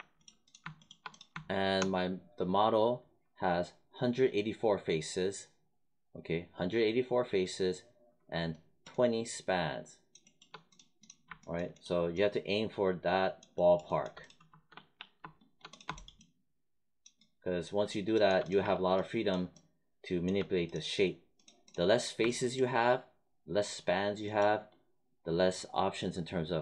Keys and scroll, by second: 14.6 3.